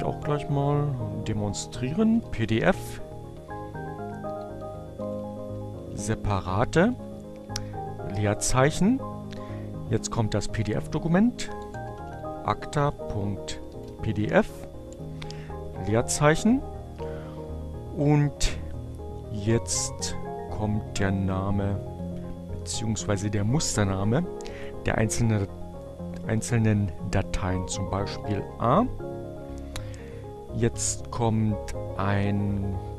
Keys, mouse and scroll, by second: 0.7-4.5 typing, 8.6-11.7 typing, 16.9-18.1 drag, 21.6 a, 26.7-27.6 typing, 31.5-32.6 typing.